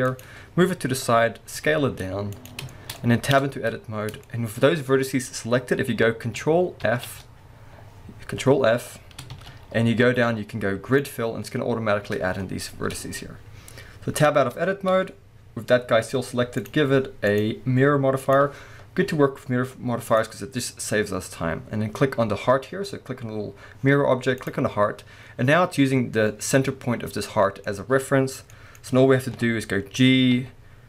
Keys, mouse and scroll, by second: 0.2 click, 1.6 s, 2.5 click, 2.7 shift+middle click, 3.4 Tab, 3.5 scroll up 1, 4.2 shift+middle click, 6.8 ctrl+f, 11.5-14.1 scroll up 1, 14.3 Tab, 14.7-16.6 scroll down 1, 16.6 click, 17.3-20.2 drag, 25.0 scroll down 1, 25.5 middle click, 29.3 KP_1, 30.3-30.8 middle drag, 30.3 g.